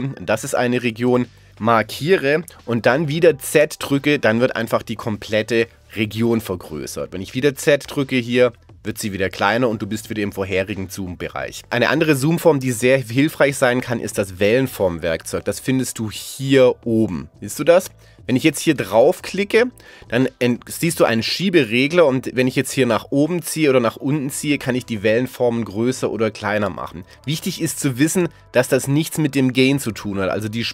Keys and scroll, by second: 3.6 z, 7.8 z.